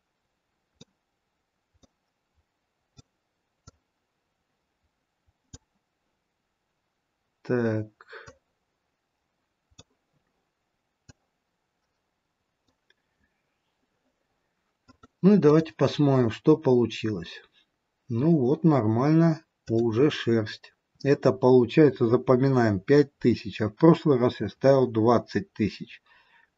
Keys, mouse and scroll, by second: 3.9 click, 8.5 click, 11.3 click, 14.8 click, 16.7-18.0 scroll up 4, 19.6 click.